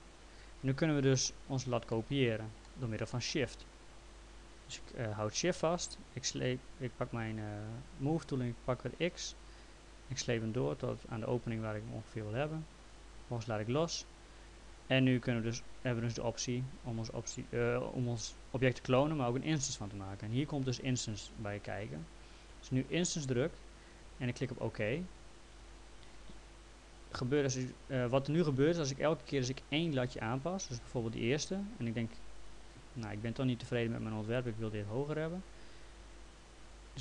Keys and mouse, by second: 1.2 middle click, 9.3 shift+click, 23.2 click, 24.7 click, 27.1 click, 32.4 click, 33.7 click, 36.5 click.